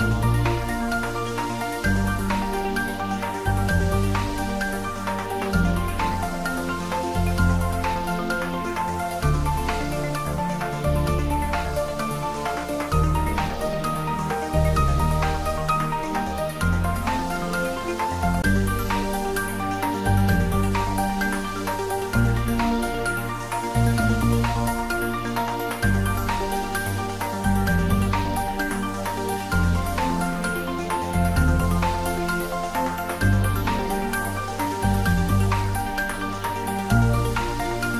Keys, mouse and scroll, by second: 1.0 click, 2.4-3.6 typing, 4.1 Up, 5.8 click, 6.7-7.0 scroll up 1, 8.0 r, 8.8 click, 9.2-10.1 typing, 11.2 click, 11.7-13.4 scroll down 1, 14.7 scroll down 1, 14.9 shift+d, 15.5 u, 15.9 y, 17.5 click, 18.1 r, 23.7 click, 25.1 g, 25.4 y, 28.2 click, 28.6-29.4 scroll up 1, 30.0-32.8 middle drag, 32.8 scroll down 1, 33.4-35.2 middle drag, 35.2 click, 35.8-37.0 scroll up 1, 37.0 g.